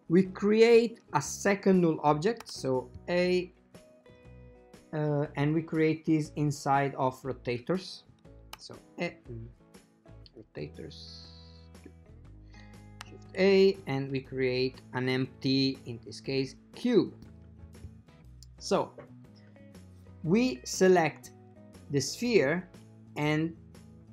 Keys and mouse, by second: 2.5 shift+a, 8.8 a, 10.4 click, 13.1 shift+a, 21.0 click, 24.0 right click.